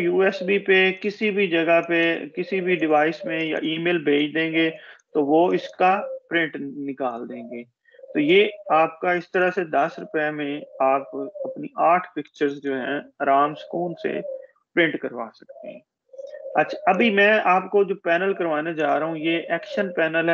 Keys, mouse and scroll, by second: 7.7 click, 16.2 ctrl+-.